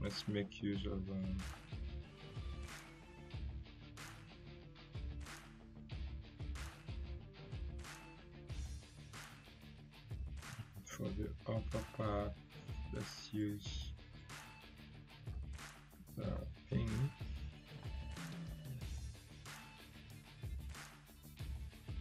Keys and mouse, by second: 0.6-1.0 drag, 8.1 click, 10.2-14.3 drag, 16.3 ctrl+z, 17.8-20.8 drag.